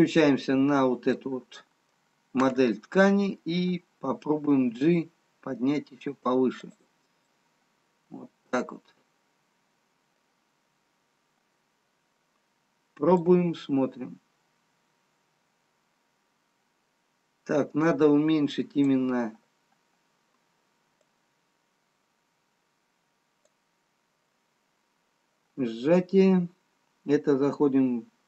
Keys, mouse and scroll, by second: 0.1 click, 1.7 middle click, 6.0 g, 7.9 middle click, 13.7 click, 21.6 click, 26.8-27.6 scroll down 4.